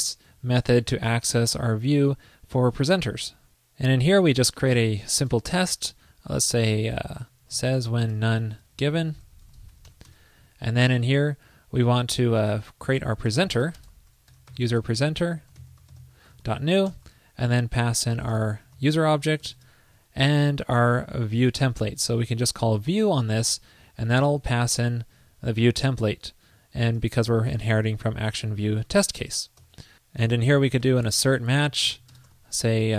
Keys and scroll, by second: 23.1 alt+shift+Left, 25.6 super+Right, 28.0 alt+Left, 29.0 super+Right.